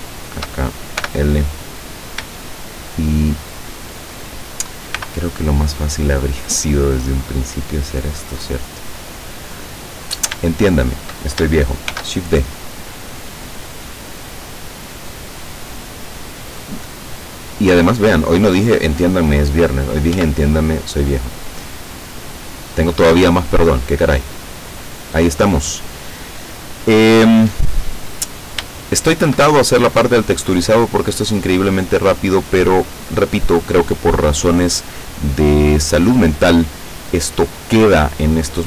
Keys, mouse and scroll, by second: 1.1 l, 1.7-2.3 scroll up 2, 2.4-3.9 shift+middle drag, 5.0 b, 6.5-8.4 drag, 9.2-9.5 scroll down 2, 9.8 scroll down 2, 10.6 shift+click, 12.0 shift+d, 19.3 click, 20.2 Tab, 21.1-21.5 scroll down 2, 21.9 middle click, 22.8-25.8 middle drag, 25.9 scroll down 2, 26.3 middle click, 27.3 middle click, 28.3-28.7 scroll up 2, 28.8 shift+middle click, 29.7 shift+middle click, 31.2-33.3 middle drag, 33.3-34.2 scroll up 1, 34.5-35.0 scroll down 1, 35.1-36.3 middle drag, 36.3 scroll up 1, 36.5-37.5 middle drag, 37.7-38.6 middle drag.